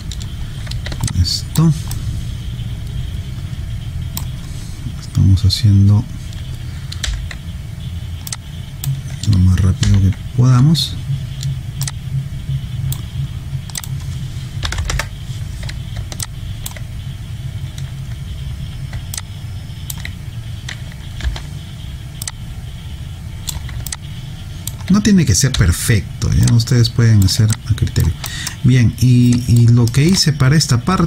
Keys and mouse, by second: 1.1 alt+click, 1.9 right click, 7.1 w, 8.3 click, 9.8 r, 10.6 e, 11.9 click, 14.7 9, 14.9 Return, 16.2 alt+click, 19.1 alt+click, 21.3 r, 22.2 click, 23.9 alt+click, 25.6 w, 26.5 click, 27.5 alt+click, 28.3 alt+right click, 29.3 alt+click, 29.9 alt+middle click.